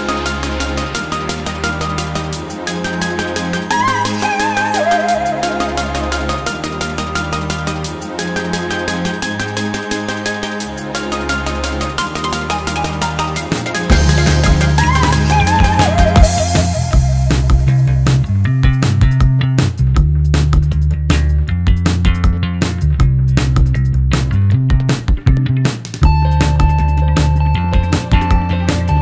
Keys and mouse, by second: 12.3 middle click, 14.0 ctrl+middle click, 14.7 ctrl+middle click, 16.6 click, 17.8 shift+click, 19.7 shift+click, 20.3 ctrl+shift+click, 23.0 ctrl+shift+click, 24.0 shift+click, 27.0 shift+click, 28.4 shift+click, 28.9 ctrl+shift+click.